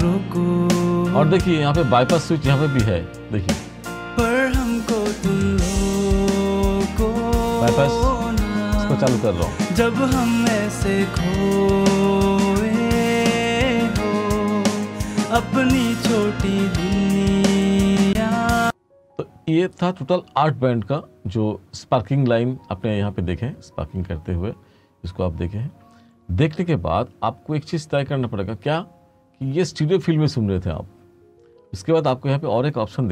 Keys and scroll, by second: 18.1 space.